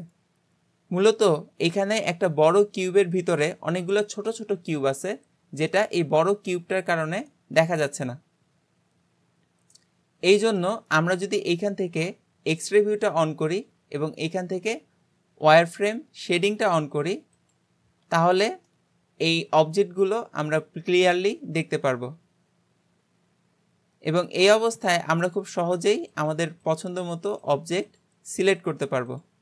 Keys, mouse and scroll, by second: 5.7-8.7 middle drag, 12.6-15.1 drag, 16.6 click, 17.4-18.7 shift+drag, 18.7-21.7 middle drag, 24.7 scroll up 2, 25.3 click, 25.7 g, 26.7 click, 26.9 g, 27.9 click, 28.1 g, 29.1 click, 29.3 g.